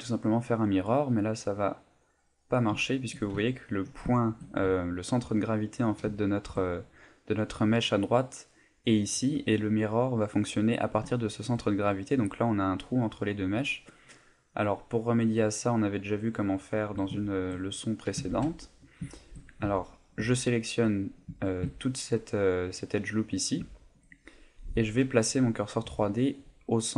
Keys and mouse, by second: 0.7 click, 2.9 shift+middle click, 3.4 ctrl+middle click, 4.1 shift+middle click, 4.7 ctrl+middle click, 6.1 ctrl+middle click, 11.1 shift+middle click, 14.6 click, 15.7 middle click, 16.8 Tab, 17.2 shift+middle click, 17.6 middle click, 18.3 ctrl+Tab, 19.1 shift+middle click, 20.3 alt+shift+right click, 21.4 shift+middle click, 21.8 ctrl+middle click, 22.3 middle click, 23.7 middle click, 24.1 middle click.